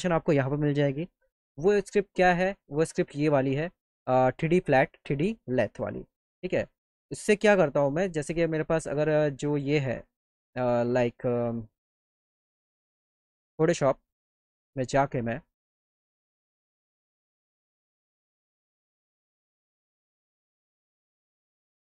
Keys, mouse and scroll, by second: 2.4 click, 9.6 click, 10.6 click, 11.7 click, 11.9 click, 13.9 click, 14.1 click, 15.0 click, 15.2 click, 18.8 click, 19.7 click, 20.8 click, 21.0 click.